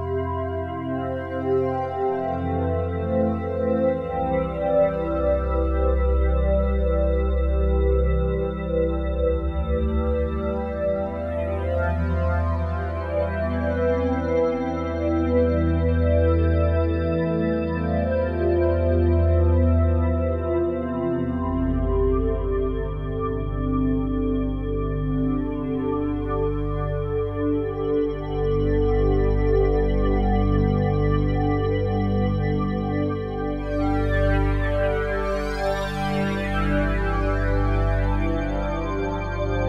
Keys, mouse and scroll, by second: 1.5-4.9 drag, 4.9 Tab, 6.0 ctrl+a, 7.1-7.7 typing, 12.1-12.9 typing, 13.7-15.2 drag, 14.4 Tab, 15.2 ctrl+a, 16.1-18.6 typing, 20.3 Tab, 22.7-25.9 drag, 22.7 typing, 25.9-27.1 typing, 29.0-30.3 drag, 33.4 shift+click, 36.5 click, 38.6 click.